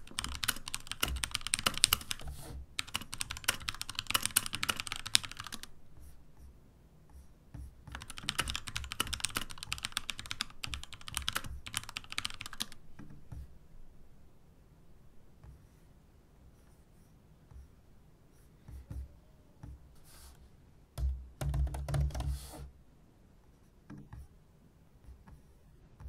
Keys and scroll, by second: 0.0-5.9 typing, 9.6-13.0 typing.